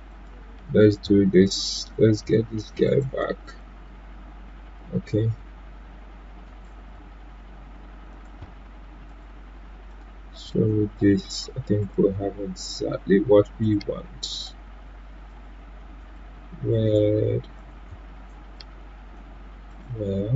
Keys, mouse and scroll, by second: 0.1 click, 0.5 Delete, 1.8-6.4 drag, 6.4 ctrl+right click, 8.1-20.3 drag.